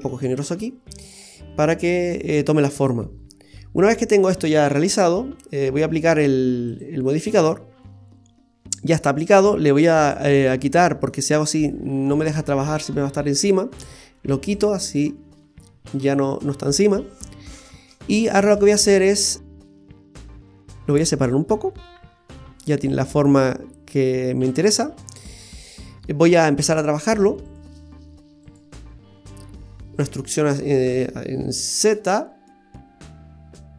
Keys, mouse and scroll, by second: 0.9 scroll down 1, 1.1 middle click, 3.0-3.3 scroll up 1, 3.3-4.2 scroll down 1, 5.9 Tab, 6.7 click, 7.5-8.1 scroll down 2, 7.8 middle click, 10.0 click, 11.1 middle click, 14.4 click, 15.9 click, 16.4-17.2 scroll up 4, 17.3 middle click, 18.7-19.2 scroll down 5, 19.2 middle click, 20.1 middle click, 21.3 click, 24.9-25.8 scroll up 2, 25.3 middle click, 25.9 scroll up 1, 26.1 Tab, 26.9 right click, 27.4 shift+right click, 30.0 e.